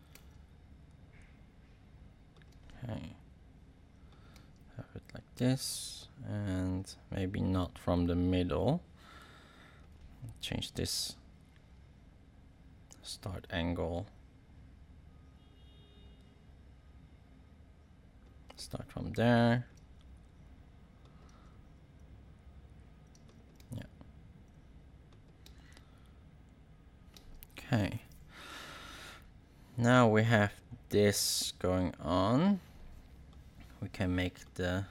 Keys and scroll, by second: 19.7 space, 21.2 space, 23.1 space, 25.4 space, 27.1 space.